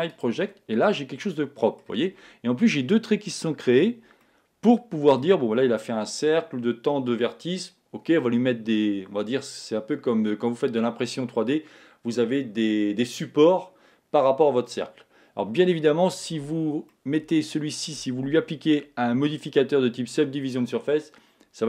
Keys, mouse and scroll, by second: 0.1 click, 0.9-2.8 middle drag, 4.2-6.1 middle drag, 16.9-18.9 middle drag.